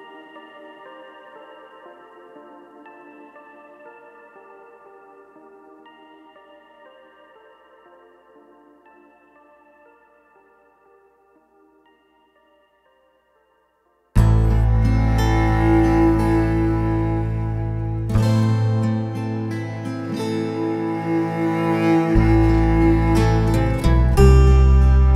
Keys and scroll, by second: 19.3 alt+super+z, 20.8 shift+super+e, 21.6 super+j, 22.1 shift+super+a.